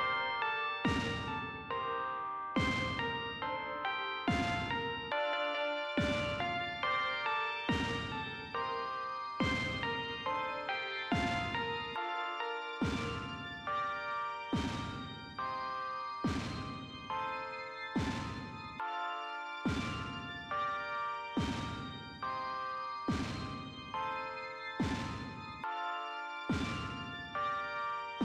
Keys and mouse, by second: 2.6 click, 8.6 click, 13.5 click, 14.7 click, 16.4 click, 17.8 click, 21.0 click.